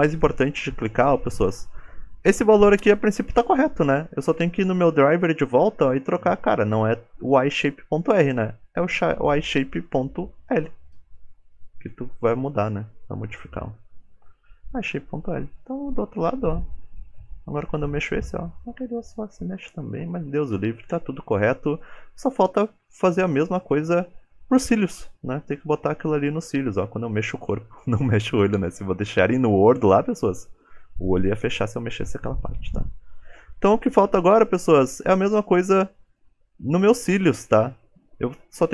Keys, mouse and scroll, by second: 4.1 click, 16.5 ctrl+Tab, 16.9 click, 17.5 g, 22.6 scroll down 4, 22.9 middle click, 23.5 middle click, 23.9 shift+middle click, 24.2-25.0 scroll down 2, 25.0 click, 25.0 scroll down 1, 25.6 g, 28.8-29.5 scroll up 9, 29.5 shift+middle click, 31.2 ctrl+Tab, 31.4 click, 33.0 right click.